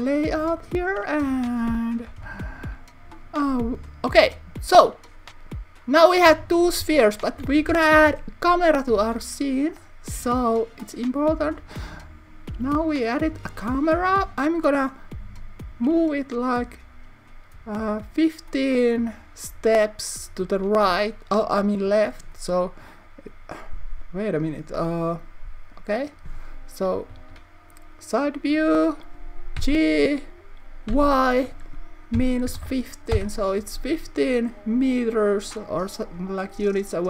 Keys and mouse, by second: 0.0 click, 1.0 click, 2.1 KP_1, 7.9 shift+a, 27.1 KP_3, 29.5 g, 30.8 y, 32.1 -, 32.5 1, 32.5 5, 33.2 Return.